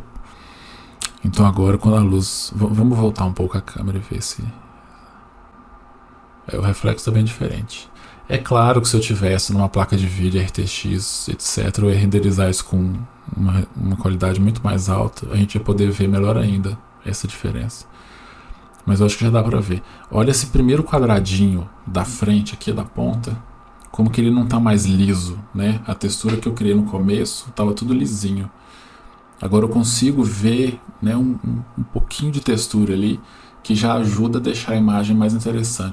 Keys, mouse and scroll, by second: 2.0-2.5 scroll down 2, 3.1-5.0 middle drag, 3.1-3.8 scroll down 1.